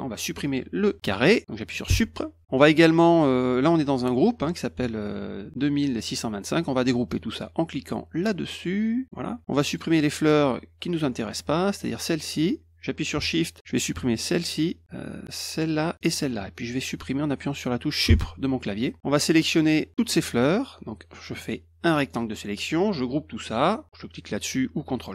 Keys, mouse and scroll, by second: 9.0 click, 9.7 click, 14.2 shift+click, 15.5 shift+click, 16.0 shift+click, 20.3-22.1 drag, 24.9 click.